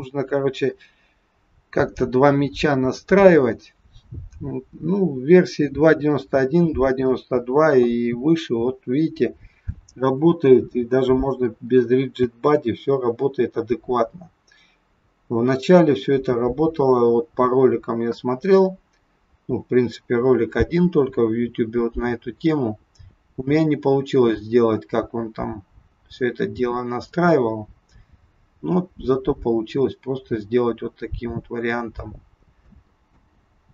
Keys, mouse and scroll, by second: 12.3 space, 32.6 space, 33.1 space.